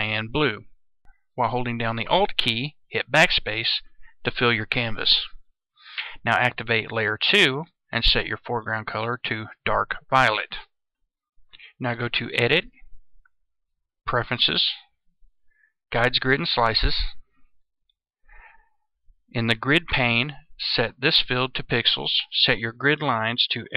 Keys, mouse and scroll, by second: 3.0 alt+BackSpace, 7.0 click, 12.0 click.